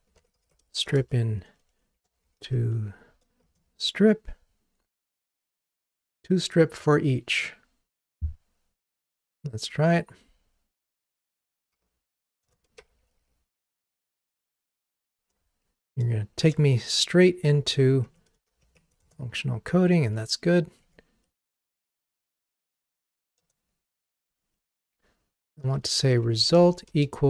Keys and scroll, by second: 3.6 Return, 12.5 Return, 21.3 Delete.